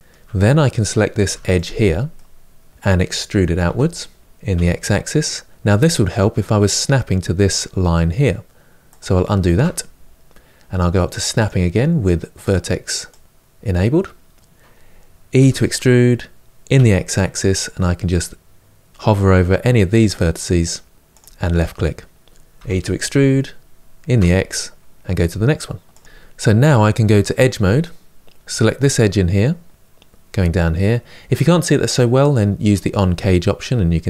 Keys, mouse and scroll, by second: 1.0 2, 1.4 click, 1.9-3.5 middle drag, 3.5 e, 9.2 ctrl+z, 11.1 click, 15.2 e, 22.3 e, 26.0-28.6 middle drag, 28.6 click, 32.5 click.